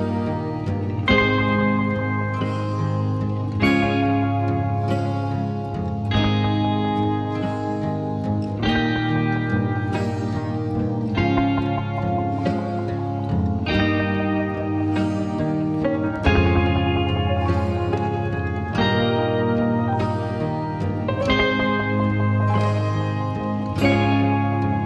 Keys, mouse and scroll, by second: 0.4-1.0 alt+scroll up 1, 1.0 typing, 4.4 click, 4.4 typing, 7.9-8.7 typing, 8.7-24.8 drag, 11.0 typing.